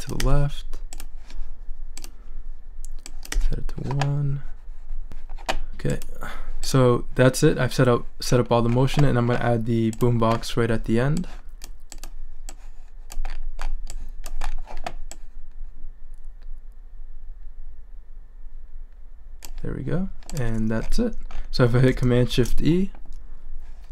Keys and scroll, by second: 0.2 i, 3.3 |, 22.3 shift+super+e.